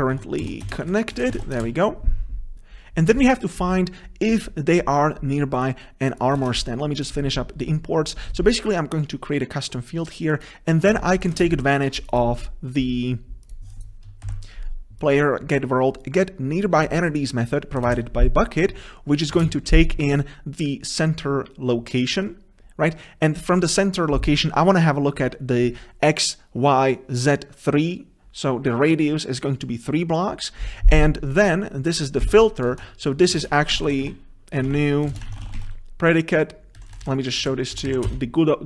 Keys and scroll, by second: 2.6 ctrl+v, 6.5 ctrl+v, 7.3 ctrl+space, 12.3 ctrl+space, 17.9 Delete, 32.4 ctrl+c, 35.1 ctrl+c, 38.2 ctrl+BackSpace, 38.3 Return.